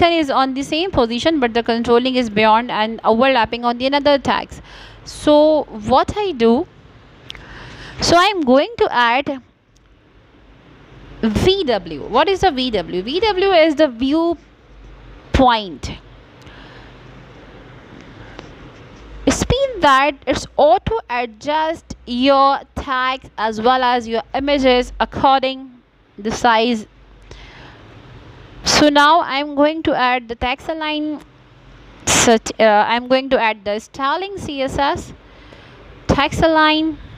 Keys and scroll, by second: 23.5 space, 23.8 s, 24.6 Return, 25.3 Caps_Lock, 25.5-26.5 typing, 26.8 Return, 29.6 space, 34.7 Return.